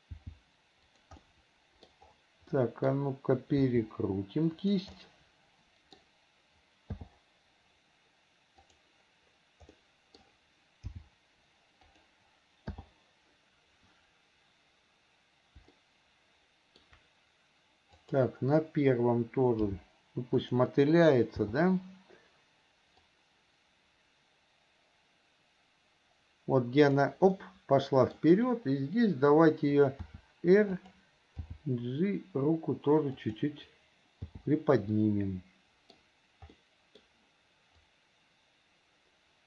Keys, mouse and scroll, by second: 1.4 middle click, 2.7 middle click, 5.1-6.2 middle drag, 8.9 click, 9.9 middle click, 16.0-17.1 shift+middle drag, 18.3 click, 23.3-27.3 drag, 27.6 middle click, 35.1-36.2 middle drag, 36.7 middle click, 38.1-39.4 drag.